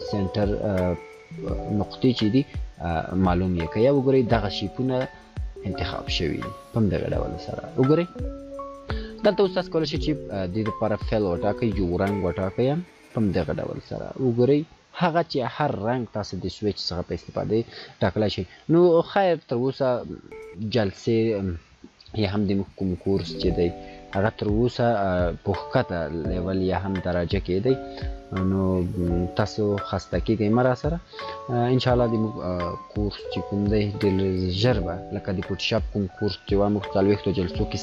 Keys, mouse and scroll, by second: 9.1 shift+click, 13.0 click, 18.2 click, 23.9 click, 25.4 shift+click, 29.6 shift+click.